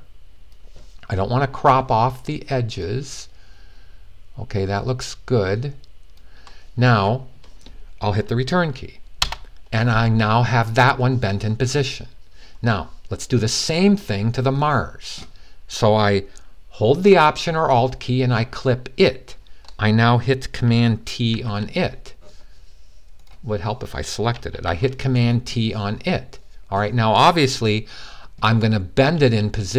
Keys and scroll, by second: 21.1 t.